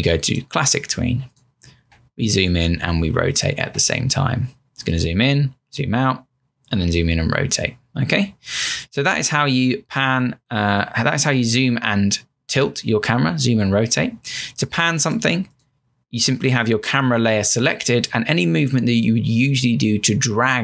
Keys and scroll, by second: 1.8 Return.